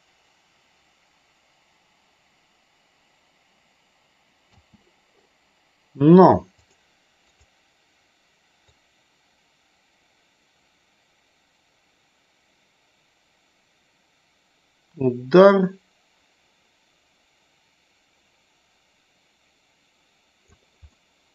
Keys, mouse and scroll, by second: 4.5 space, 6.5 click, 7.2 click, 8.6-20.5 drag, 20.9 middle click.